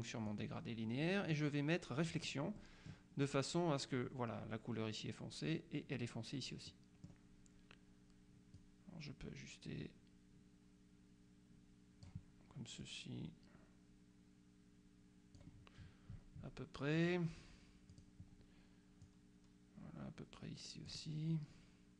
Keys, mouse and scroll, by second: 0.4 click, 1.4 click, 6.8 middle click, 8.6-12.6 drag, 12.9-15.9 drag, 17.0 click, 18.0 click, 19.1-21.5 drag.